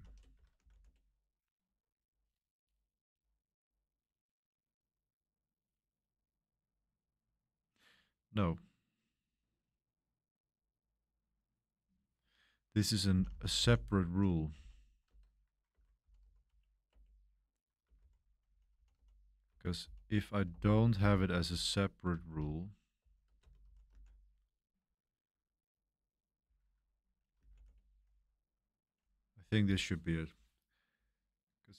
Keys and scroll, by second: 0.0-1.3 typing, 12.8-16.5 typing, 15.7 Escape, 16.9 Return, 17.6-24.4 typing, 26.4 Escape, 26.7-28.9 typing.